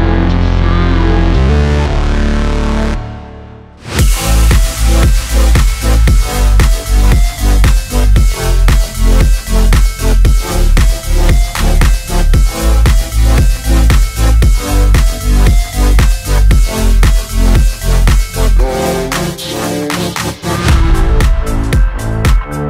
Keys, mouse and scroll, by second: 2.4-2.8 scroll up 1, 2.8 space, 2.9 click, 3.1 space, 5.0 click, 5.9 scroll down 1, 6.7 click, 8.5 scroll down 1, 9.2-9.6 scroll up 1, 10.1 click, 10.9 shift+click, 12.3-13.5 typing, 13.6 click, 16.6 click, 20.3 ctrl+c, 22.1 shift+click.